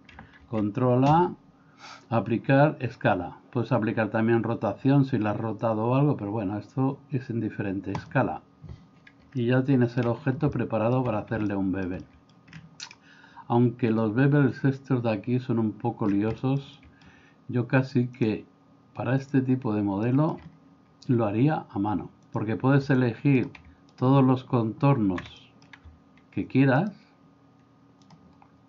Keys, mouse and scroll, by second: 0.4 ctrl+a, 9.4-10.0 shift+middle drag, 10.5-11.0 middle drag, 11.5-12.3 middle drag, 14.0-15.8 drag, 16.4-17.0 shift+middle drag, 18.3 click, 20.1 middle click, 22.4 click, 25.4 middle click.